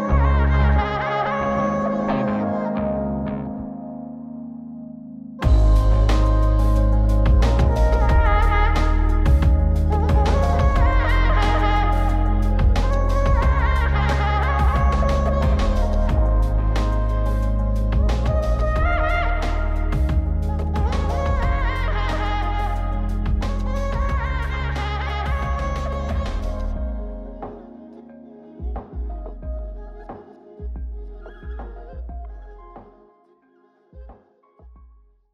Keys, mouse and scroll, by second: 0.2 scroll down 2, 0.5 middle click, 1.5 click, 2.5 middle click, 3.1-3.7 scroll up 1, 3.7 click, 5.6-6.6 drag, 7.2 click, 10.9-12.5 drag, 14.5-17.0 drag, 17.4 scroll up 1, 17.4 middle click, 18.0 scroll down 3, 19.3 scroll up 2, 19.7 middle click, 20.8-21.3 scroll up 4, 21.7-25.9 drag, 26.2-26.6 scroll down 1, 27.8 click, 28.7 m, 31.0 m.